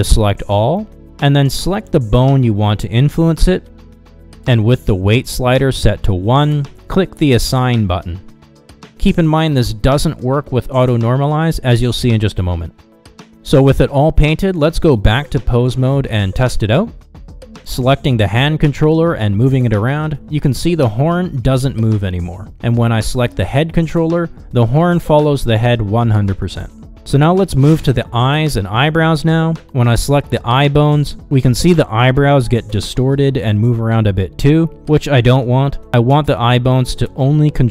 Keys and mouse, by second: 0.5 Tab, 1.6 a, 5.1 click, 8.2 click, 11.4 ctrl+Tab, 12.6 click, 16.0-16.4 shift+middle drag, 17.4 click, 21.7 r, 23.6 r, 31.4 click, 33.0 click, 34.1 ctrl+Tab, 37.4 r.